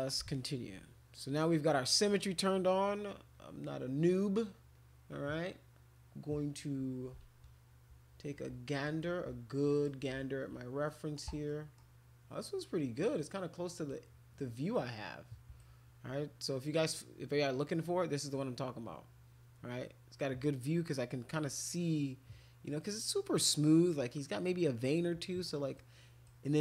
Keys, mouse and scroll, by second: 0.3 alt+click, 8.8 right click, 9.7 click, 9.7 middle click, 10.8 middle click, 11.5 middle click, 13.2 middle click, 13.9-15.6 right drag, 25.7 right click.